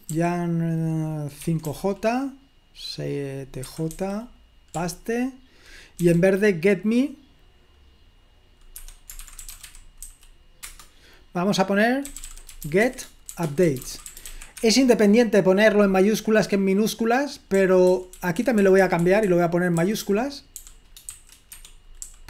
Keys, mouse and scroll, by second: 0.7-2.3 typing, 3.7 typing, 4.8 typing, 6.0 typing, 8.8 Escape, 9.0-10.5 typing, 10.6 Return, 11.8-14.8 typing, 17.3-22.2 typing, 21.6 Escape.